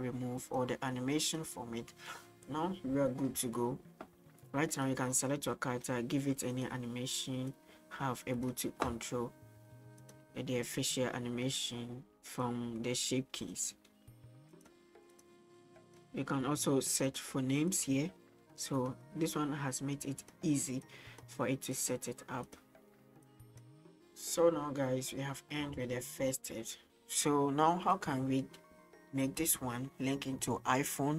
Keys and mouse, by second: 4.8 right click, 7.6 click, 10.0 click, 10.4 middle click, 12.4-14.5 drag, 15.3 click, 17.0 click, 17.8-18.8 drag, 20.2 click, 20.9 click, 23.2 click.